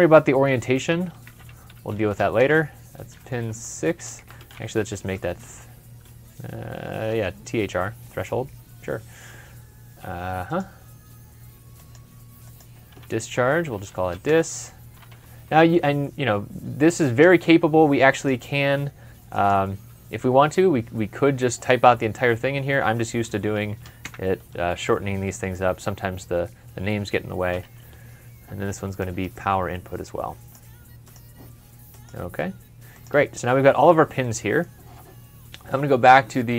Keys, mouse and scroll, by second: 0.5-3.0 typing, 2.4 Tab, 4.1 shift+Tab, 4.2-5.1 typing, 13.2-15.0 typing, 16.9 Return, 22.9-24.9 typing, 27.5 typing, 33.2 scroll up 1, 33.6 scroll down 1, 34.2 middle click.